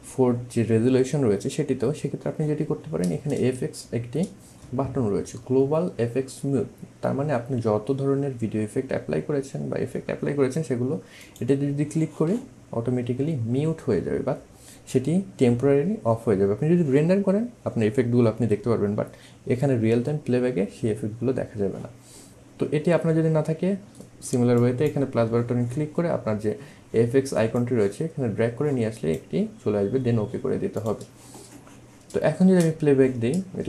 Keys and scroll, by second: 32.4 space.